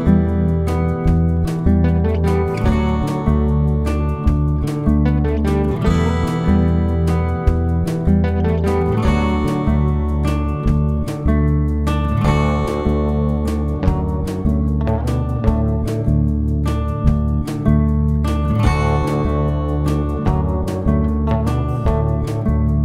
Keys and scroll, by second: 1.0 F1, 2.9 F1, 3.6 F7, 4.5 F1, 4.7-5.1 typing, 5.9 F7, 7.2 F1, 7.5-8.4 typing, 9.8 Delete, 10.0 +, 10.3 space, 10.8 shift+F6, 14.0 F1, 14.8 ctrl+d, 15.4 ctrl+*, 16.2 space, 17.3-18.0 typing, 18.5 shift+F6, 21.8 F1, 22.2 ctrl+d.